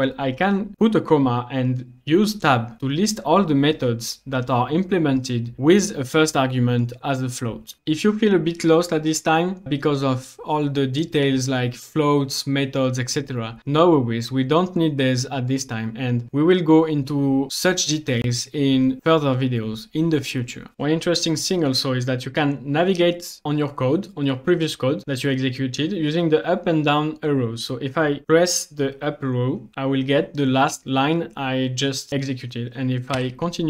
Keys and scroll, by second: 2.8 Tab.